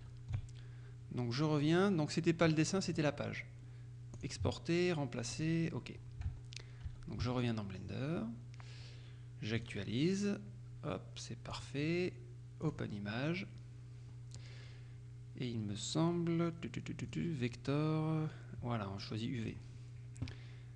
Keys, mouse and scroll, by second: 0.1 Tab, 2.9 click, 4.3 click, 5.4 click, 6.9 Tab, 9.6 click, 11.6 click, 12.7 click, 14.3-14.8 scroll down 1, 17.1 click, 19.5 click, 19.9-20.5 scroll down 1.